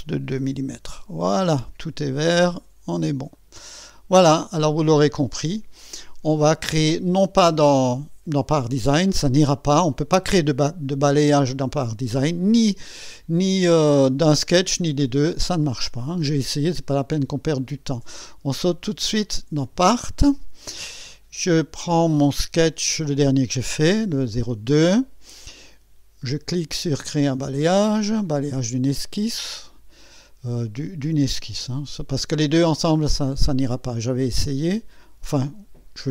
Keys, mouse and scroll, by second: 0.5 KP_2, 0.7 Return, 3.3 click, 16.7-17.8 right drag, 18.7 click, 19.6 click, 28.9 click.